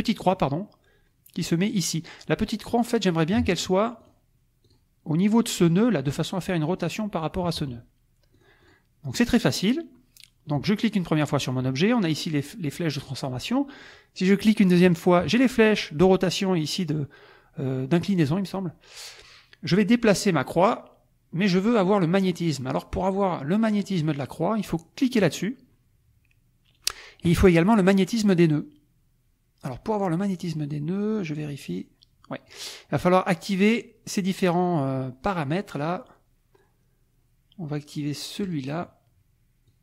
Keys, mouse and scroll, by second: 2.7 click, 4.0 click, 4.6 click, 5.6 click, 8.3 click, 9.1 click, 10.8 click, 11.1 click, 14.8 click, 20.4-24.1 drag, 25.2 click, 31.1-32.7 drag, 38.4 click, 39.7-39.8 drag.